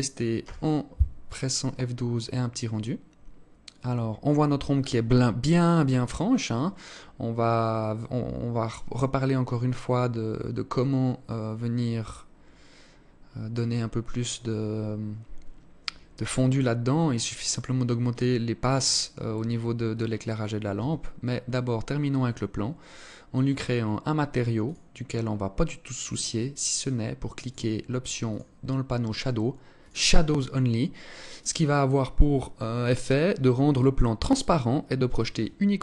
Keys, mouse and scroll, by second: 20.2 Escape, 23.0 click, 24.1 click, 25.5 click, 27.8 click, 28.1-29.3 scroll down 4, 29.3 click.